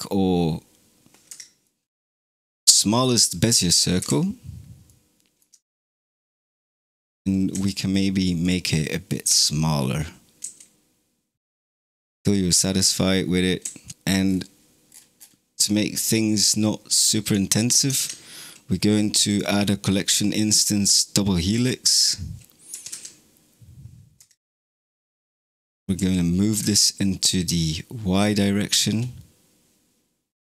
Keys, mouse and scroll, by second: 1.5-2.0 middle drag, 2.0-2.4 scroll down 11, 2.8-3.9 middle drag, 3.9 KP_Decimal, 4.7-7.4 middle drag, 7.4 s, 9.1 KP_0, 10.3 s, 11.7 s, 13.5 s, 13.9 space, 14.1-15.2 scroll down 17, 16.3-17.1 scroll up 5, 17.1 click, 17.8 shift+a, 22.6 g, 25.2 click, 25.8 g.